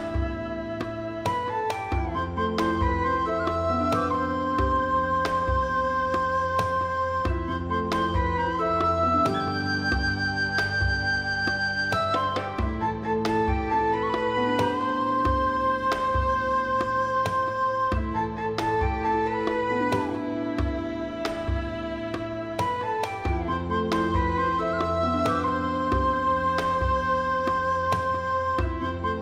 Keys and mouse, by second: 2.4 right click, 2.6 shift+middle click, 2.9 shift+middle click, 3.1 g, 3.2 middle click, 5.8 right click, 6.1 g, 6.2 middle click, 7.4 click, 7.6 shift+middle click, 7.9 click, 8.2 g, 8.2 middle click, 9.3 click, 9.8 middle click, 9.8 g, 10.5 click, 10.7 middle click, 11.1 middle click, 11.6 click, 12.0 right click, 12.2 g, 12.3 middle click, 12.9 right click, 13.4 click, 14.0 shift+click, 14.3 g, 14.3 middle click, 15.5 click, 15.7 middle click, 16.1 shift+middle click, 16.5 click, 17.5 click, 17.7 g, 17.8 middle click, 18.8 click, 19.1 click, 19.4 middle click, 19.7 right click, 20.6 shift+click, 20.8 middle click, 20.8 g, 21.3 click, 21.5 click, 21.6 g, 21.6 middle click, 22.1 click, 22.7 shift+middle click, 22.9 middle click, 23.1 alt+z, 23.3 alt+middle click, 23.4 middle click, 23.8 middle click, 24.1 middle click, 25.1 shift+middle click, 25.4 alt+z, 26.2 middle click, 26.5 middle click, 26.9 click, 27.4 s, 27.5 middle click, 28.7 click, 28.8 middle click, 29.1 shift+middle click.